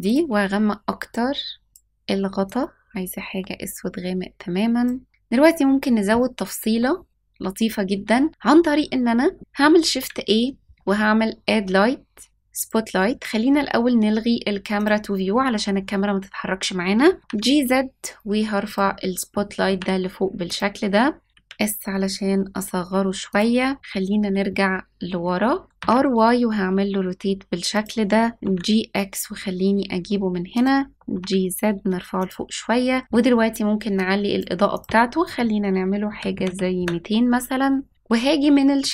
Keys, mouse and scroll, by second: 0.0 click, 1.7 click, 9.8 shift+a, 14.7 click, 17.2 g, 19.5 g, 21.3 s, 23.7-24.1 scroll down 3, 24.5-25.6 middle drag, 25.6 r, 28.3 g, 30.9 g, 32.6-33.1 scroll up 2, 33.9-36.8 drag.